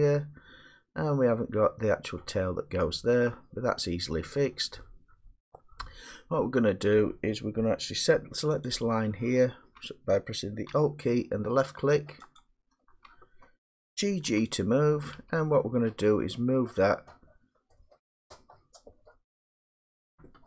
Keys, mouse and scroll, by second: 4.5 middle click, 5.6 middle click, 8.7 click, 12.4 alt+click, 14.9 g, 15.2 g.